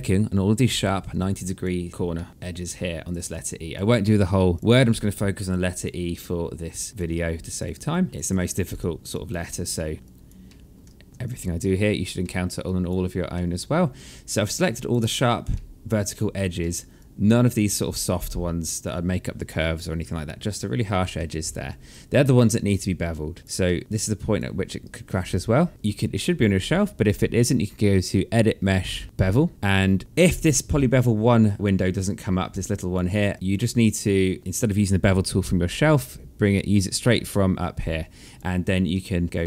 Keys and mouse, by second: 0.7 alt+click, 1.9 alt+middle click, 2.0 alt+click, 2.6 shift+click, 3.0 alt+click, 3.6 alt+middle click, 4.1 alt+click, 4.5 alt+middle click, 5.0 alt+click, 5.6 alt+middle click, 6.3 alt+click, 7.0 shift+click, 7.4 alt+click, 8.1 alt+click, 8.5 alt+middle click, 8.9 alt+click, 9.0 alt+middle click, 9.9 alt+click, 10.7 shift+click, 11.1 alt+middle click, 12.2 alt+click, 12.9 alt+middle click, 13.7 alt+click, 15.1 alt+middle click, 16.5 alt+click, 20.7 alt+middle click, 21.2 alt+click, 23.2 alt+click, 23.4 alt+middle click, 23.8 alt+click, 25.7 alt+middle click, 27.6 click, 31.1 click, 31.7 click, 33.1 alt+click, 36.1 click, 38.6 alt+middle click.